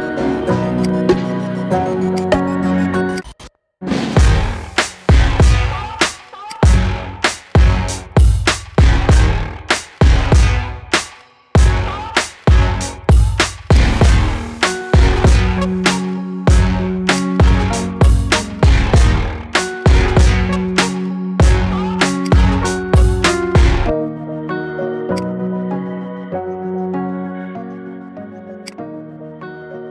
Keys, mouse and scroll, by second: 0.6 click, 1.1 scroll up 1, 1.3 shift+middle click, 1.9 click, 2.2 scroll down 2, 2.6-2.9 shift+middle drag, 2.9 click, 3.8 shift+a, 12.4 s, 22.3 scroll up 1, 23.3 Tab, 25.0 click, 25.8 g, 29.0 Tab, 29.5-29.9 scroll down 1.